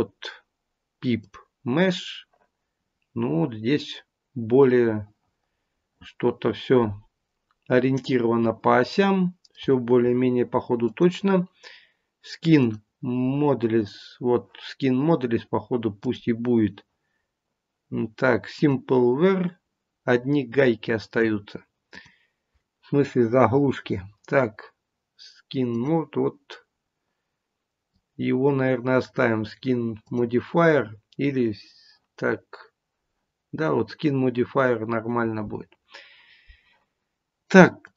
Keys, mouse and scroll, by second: 2.7-4.7 scroll down 2, 4.7 middle click, 4.7-5.8 scroll down 1, 10.7 click, 13.0 click, 15.9 click, 18.9 click, 21.8 click, 37.8 click.